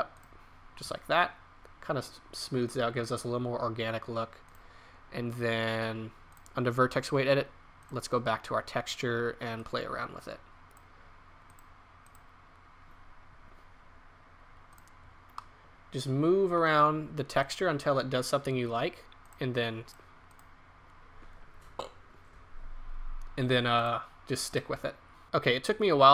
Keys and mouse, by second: 4.4-14.4 drag, 14.7-16.3 drag, 25.2-26.1 middle drag.